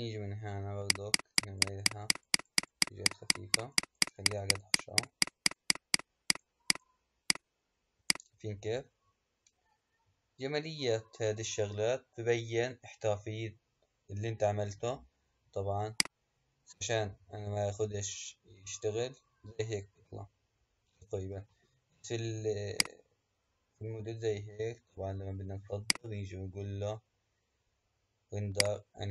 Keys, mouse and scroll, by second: 0.7-3.8 drag, 3.9-11.0 drag, 11.9-15.4 scroll up 3, 15.9 click, 16.7 space, 21.5 space, 22.8 click, 25.8-29.1 drag.